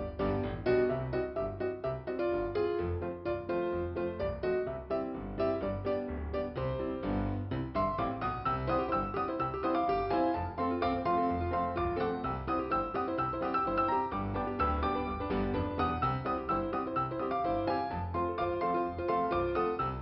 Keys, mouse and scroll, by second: 1.3 click, 3.1 click, 6.1 click, 7.9 click, 8.9 click, 11.0 middle click, 11.9 click, 15.7 click, 15.9 click.